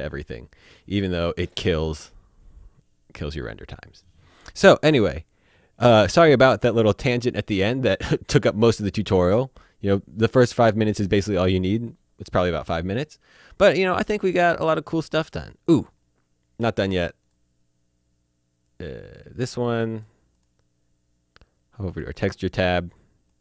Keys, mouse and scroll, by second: 17.0 click, 18.8 click, 21.9 click.